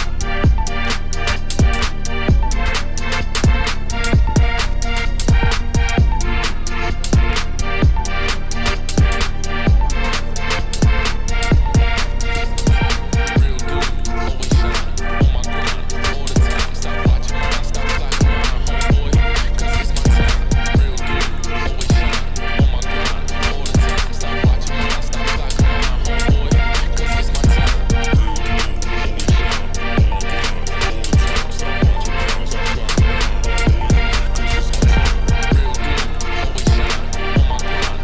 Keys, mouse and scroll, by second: 0.1 click, 0.2-1.3 middle drag, 1.3 Tab, 1.4 3, 1.5 click, 1.7 middle click, 2.5 shift+d, 3.4 ctrl+z, 3.6 ctrl+z, 4.0 click, 4.6 shift+d, 5.0 p, 5.2 Tab, 5.4 click, 5.6 Tab, 5.8 middle click, 6.4 KP_1, 7.0 z, 7.2 shift+middle click, 7.5 scroll up 1, 7.7 a, 11.7 ctrl+r, 12.7 ctrl+r, 13.8 alt+shift+click, 14.1 alt+shift+click, 14.3 ctrl+b, 17.5 middle click, 18.4 KP_7, 18.8 e, 22.7 middle click, 23.6 KP_1, 24.1-25.3 scroll up 3, 25.3 a, 26.5 middle click, 26.6 scroll down 1, 27.0 middle click, 27.3 Tab, 27.7 z, 28.0-28.5 scroll down 1, 28.5 middle click, 29.3-29.7 scroll up 1, 29.7 click, 29.8 shift+middle click, 30.0-30.8 scroll up 1, 30.8 click, 31.3-34.5 drag, 34.8-38.0 shift+drag.